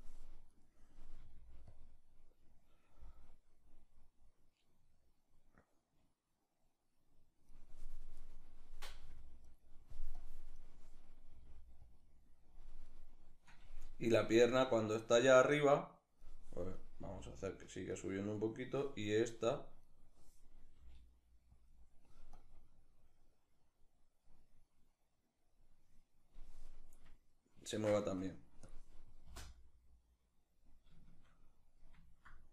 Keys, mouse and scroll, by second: 0.1 right click, 0.8 r, 1.5 click, 3.1-7.8 drag, 7.8 right click, 8.6 r, 9.2 right click, 9.8-11.6 drag, 10.9 r, 12.5 right click, 13.7-17.6 drag, 16.6 g, 18.0 right drag, 19.0 click, 19.5 right click, 20.4 g, 21.3 click, 22.1-26.9 drag, 26.9-28.3 middle drag, 28.3 drag, 28.5-32.5 middle drag, 28.9 space.